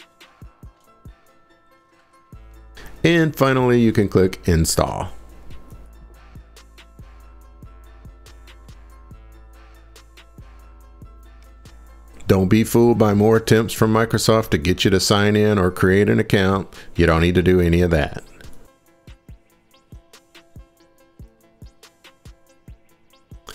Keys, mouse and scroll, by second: 5.9 click, 21.8-23.5 drag.